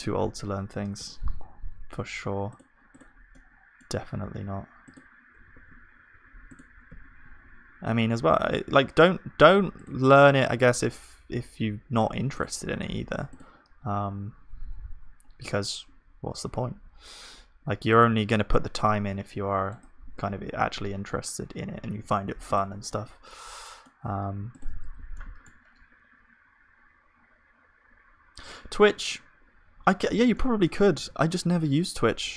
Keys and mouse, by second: 1.0 ctrl+s, 5.5 ctrl+s, 6.9 z, 8.1 z, 8.8-18.7 middle drag, 10.9-15.3 drag, 18.7-20.0 drag, 18.7 z, 20.0 Tab, 21.9 ctrl+s, 22.9-24.5 drag, 23.4-24.5 right drag, 24.8 Tab, 24.8-26.5 drag, 24.8-26.5 right drag, 31.0 ctrl+s, 32.2 KP_1.